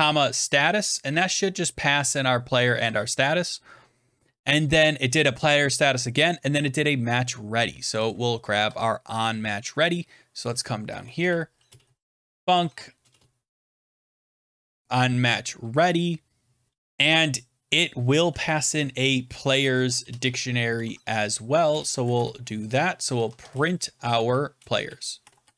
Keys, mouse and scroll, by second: 0.0-0.3 typing, 1.6 click, 1.8 BackSpace, 2.6 click, 2.7 ctrl+s, 6.5 scroll down 4, 7.8 click, 8.0 click, 8.6 ctrl+c, 9.2 scroll down 4, 10.4 click, 10.4-10.8 scroll, 10.8 Return, 11.1 Return, 11.6-15.3 typing, 16.9 ), 17.9 Left, 19.3-25.5 typing.